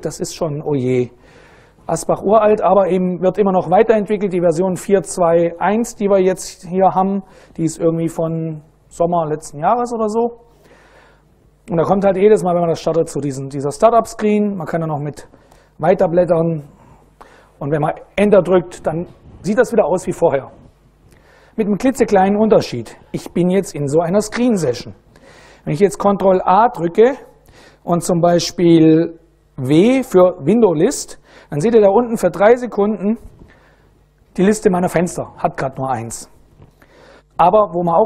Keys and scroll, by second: 15.1 space, 17.7 Return, 26.5 ctrl+a, 29.3 w, 37.1 ctrl+u, 37.3 Return.